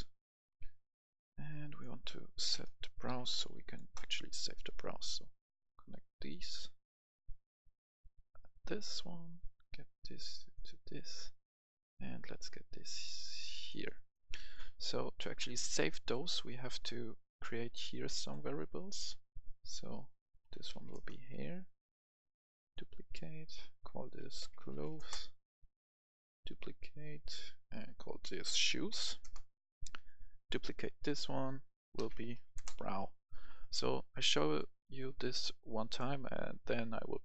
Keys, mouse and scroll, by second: 2.3-3.5 typing, 6.3-10.8 drag, 10.8 right click, 11.7 click, 12.4-13.9 drag, 13.9 right click, 16.4 scroll down 1, 17.1-18.0 scroll up 1, 18.2 click, 20.4-20.8 typing, 20.9 Return, 21.7 right click, 22.6 click, 24.2-24.7 typing, 25.0 Return, 26.4 right click, 27.2 click, 28.4-29.1 typing, 29.2 Return, 29.9 right click, 30.9 click, 31.9-32.4 typing, 32.5 Return, 33.3 right click, 34.0 scroll down 1, 34.3 right click, 35.3-35.7 scroll up 1, 35.7 right click, 36.2 scroll up 1, 36.7-37.2 right drag.